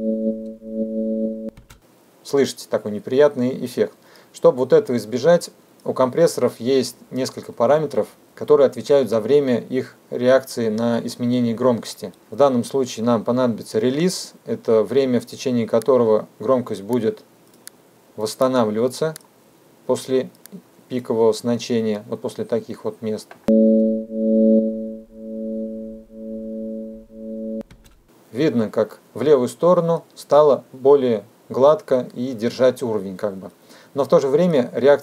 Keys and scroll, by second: 23.4 space, 27.3 space.